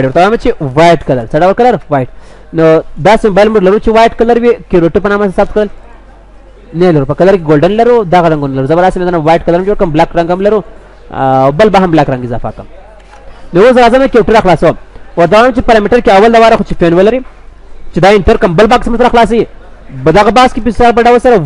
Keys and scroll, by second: 3.1 ctrl+s, 3.8 ctrl+w, 12.1 ctrl+s, 13.3 ctrl+w.